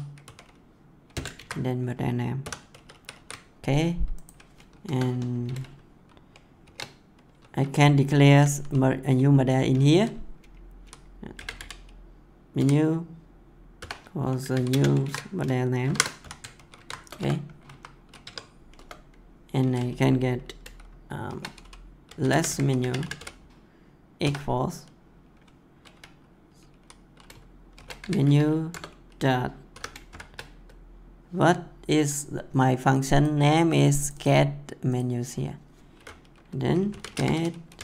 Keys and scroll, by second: 1.1 \, 1.3 ctrl+v, 2.3 ;, 2.7 ctrl+s, 4.8 Return, 6.6 shift+4, 11.1-12.0 typing, 13.7 =, 14.5 w, 14.7 space, 15.0 ctrl+v, 15.8 shift+9, 16.2 ;, 16.5 ctrl+s, 17.0 Return, 17.6 Up, 18.2 Tab, 18.7 Return, 21.2-23.4 typing, 27.5-28.4 typing, 28.6 Return, 29.7 -, 30.0 shift+., 36.9-37.8 typing.